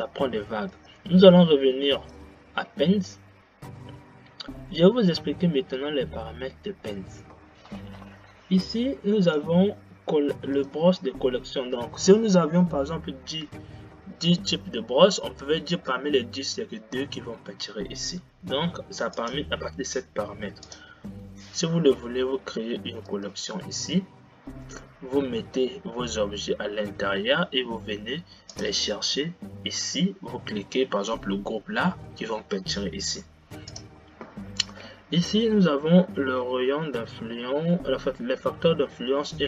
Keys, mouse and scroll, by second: 1.1-4.2 drag, 4.2-5.1 scroll down 2, 5.1 scroll up 2, 5.4-8.2 scroll down 2, 9.7-11.0 drag, 19.6-21.2 drag, 23.5-26.6 drag, 29.0-32.3 drag.